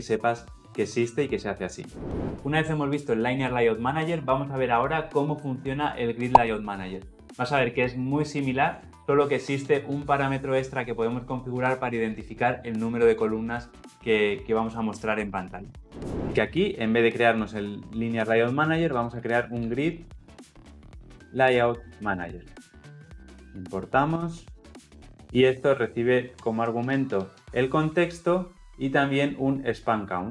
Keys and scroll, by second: 23.1 alt+Return, 25.2 ctrl+p.